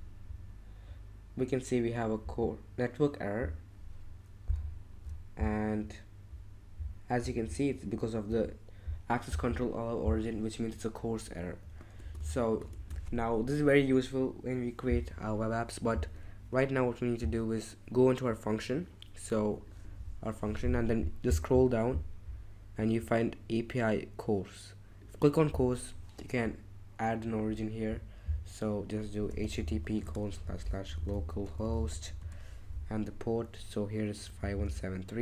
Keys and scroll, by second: 12.0 ctrl+shift+Tab, 12.7 ctrl+shift+Tab, 29.0-32.7 typing, 34.5 super+c.